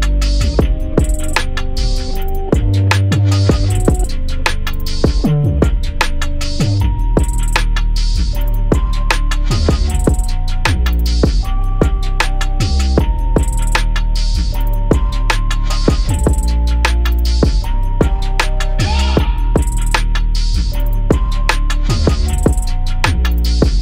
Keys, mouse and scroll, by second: 2.2 click, 4.6 alt+shift+click, 5.8-7.8 alt+drag, 8.7 click, 9.6 scroll up 1, 10.2-13.1 drag, 14.8 scroll down 1, 15.9-16.3 scroll up 1, 19.9-23.8 drag.